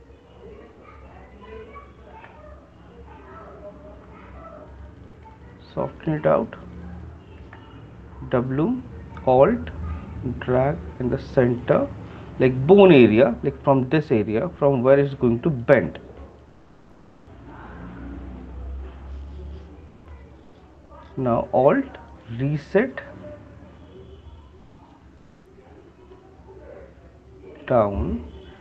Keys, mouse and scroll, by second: 1.8 right click, 5.2 click, 5.6 ctrl+click, 5.8 ctrl+click, 6.6-8.4 ctrl+click, 8.2 ctrl+click, 8.8 w, 11.8 alt+click, 13.0 alt+click, 15.7 alt+click, 22.4 alt+click.